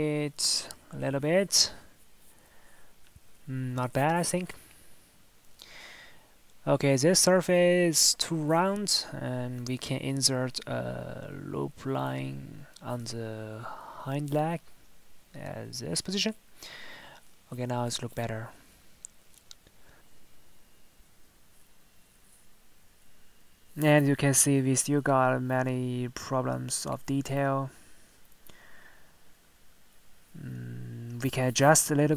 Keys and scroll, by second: 3.1 Tab, 5.1 Tab, 6.7 Tab, 16.5 Tab, 18.6 Tab, 19.0 Tab, 26.0 Tab.